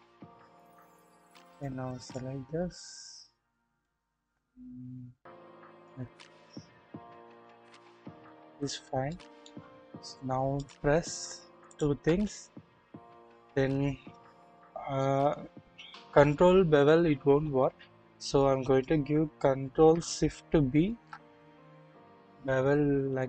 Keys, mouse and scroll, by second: 0.5 shift+middle click, 1.5 middle click, 3.8-5.9 middle drag, 6.1 alt+z, 6.8-7.3 scroll down 1, 7.3-8.4 middle drag, 9.0 shift+middle click, 9.6 shift+scroll up 1, 10.6 click, 10.6 scroll up 1, 11.6 shift+click, 20.7 ctrl+shift+b.